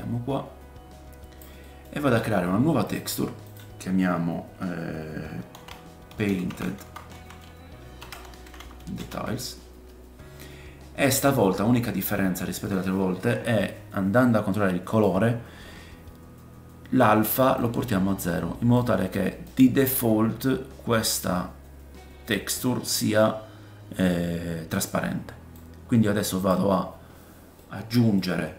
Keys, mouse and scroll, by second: 1.8-2.5 scroll up 5, 2.8 click, 25.5 click, 26.8-27.6 scroll down 5, 27.6 middle click.